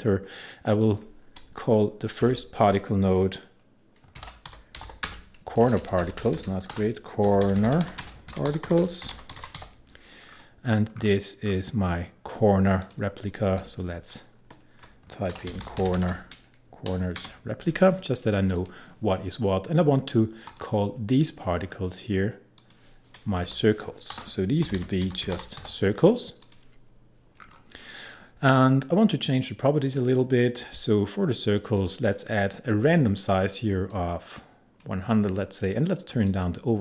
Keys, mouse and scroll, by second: 2.2 Return, 3.9-5.5 typing, 6.7-10.1 typing, 10.2-12.8 scroll down 1, 12.8 click, 12.9 click, 13.5 Return, 13.9 Left, 15.1-17.2 typing, 18.6 click, 21.7 scroll down 1, 22.6 click, 23.5 Return, 23.9-26.1 typing, 26.4 click, 27.4-28.8 scroll down 1, 29.3 click, 33.9-36.3 drag.